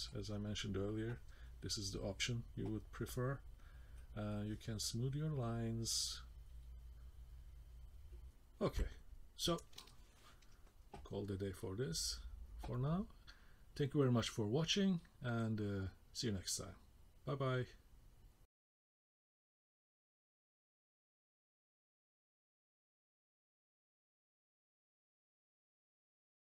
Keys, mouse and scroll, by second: 0.4-2.3 scroll up 1, 3.9 click, 8.3 middle click, 8.3 scroll down 1, 8.3-8.7 scroll down 2, 8.7 shift+middle click, 9.1 shift+scroll up 1, 9.3 scroll down 2, 9.7 shift+middle click, 10.6 middle click, 11.4-11.8 scroll up 1, 12.0 shift+middle click, 13.0 scroll up 1, 14.2 middle click, 15.5 shift+middle click.